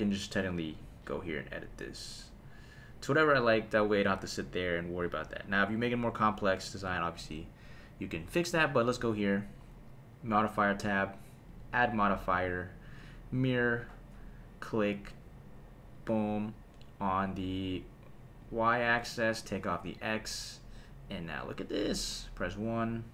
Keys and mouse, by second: 0.8 click, 3.6 click, 8.7 click, 10.3 click, 11.5-13.1 drag, 14.6 click, 18.4 click, 19.4 click, 21.9 shift+middle click, 22.2 KP_1.